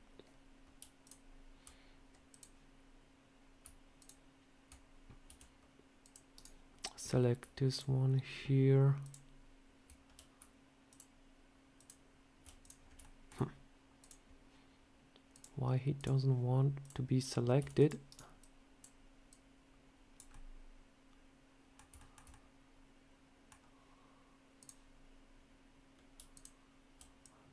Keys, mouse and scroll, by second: 0.9 alt+click, 1.0 alt+click, 2.2 click, 3.8 click, 5.1 c, 7.6 shift+click, 10.2 shift+click, 10.7 alt+shift+click, 10.9 alt+shift+click, 12.5 click, 12.7 scroll up 2, 12.9 shift+middle click, 13.9 click, 15.2 click, 15.9 click, 16.7 click, 17.4 c, 18.3 click, 19.1 click, 20.2 middle click, 21.8 shift+middle click, 22.2 middle click, 24.5 click, 26.2 alt+click, 27.1 click.